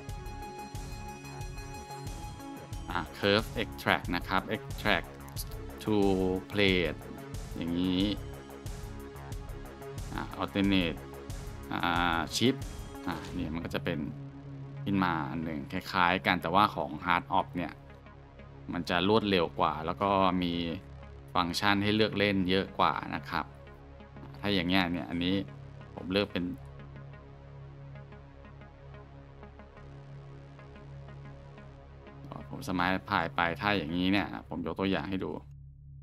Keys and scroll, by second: 15.9 shift+Tab, 17.2 g, 18.1 Tab, 24.3-24.6 scroll, 25.1 Tab, 27.5 Tab, 27.7 scroll, 28.9 q, 31.3 Tab.